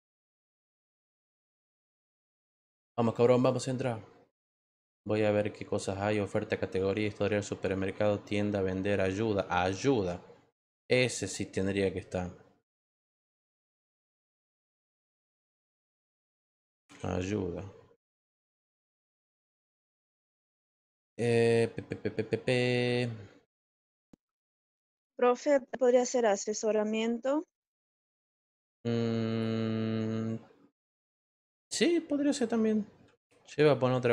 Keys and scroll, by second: 15.8-17.3 typing.